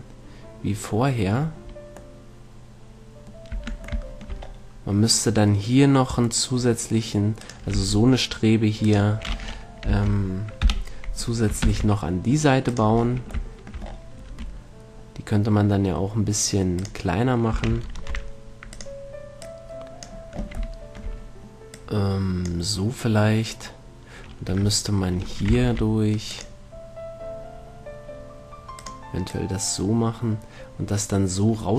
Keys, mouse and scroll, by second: 0.8 middle click, 3.8 Tab, 7.7-11.0 right drag, 8.0 Tab, 10.2 ctrl+l, 11.0 KP_7, 12.0 shift+d, 13.1-15.0 drag, 14.6 r, 15.2 middle click, 17.2-19.0 drag, 17.8 s, 19.2-21.6 drag, 22.0-23.0 drag, 23.0 middle click, 25.8 ctrl+r, 29.2-31.3 drag.